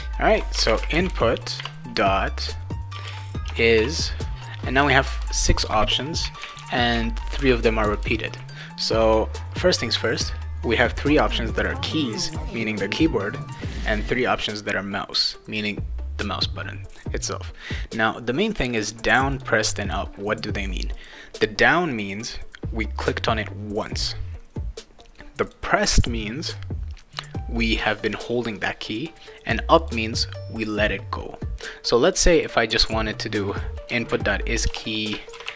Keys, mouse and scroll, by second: 0.3-3.8 typing, 18.8 click, 19.3 click, 19.8 click, 21.0 click, 25.4 click, 29.8 click, 32.1 click, 32.3 click, 33.9-35.5 typing.